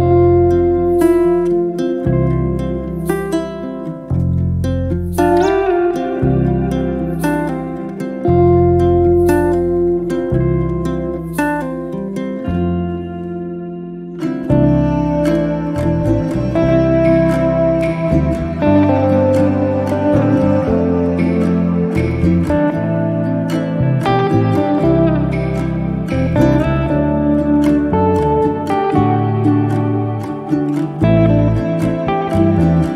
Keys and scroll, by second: 19.8 0, 20.0 KP_Decimal, 20.3 5, 22.1 0, 22.4 KP_Decimal, 22.7 5.